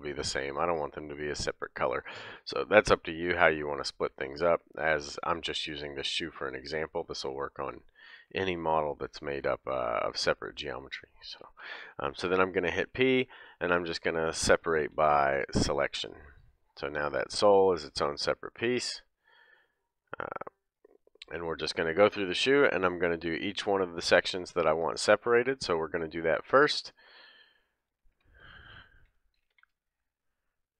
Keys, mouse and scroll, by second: 0.0-2.5 typing, 3.5-9.9 typing, 4.2-19.9 middle drag, 12.4 p, 14.8 p, 17.6 Tab, 18.6 Tab, 19.2 Tab, 19.9 click, 20.0-20.7 middle drag, 20.7 click, 20.8-27.8 middle drag, 26.6 Tab, 27.8 click, 28.2 l, 29.5 p.